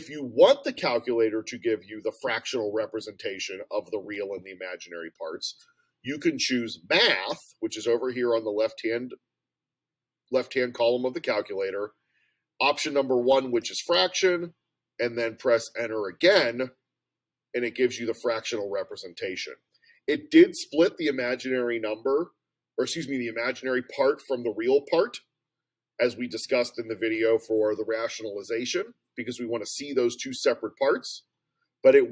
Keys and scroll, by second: 13.6 Return, 16.5 Return.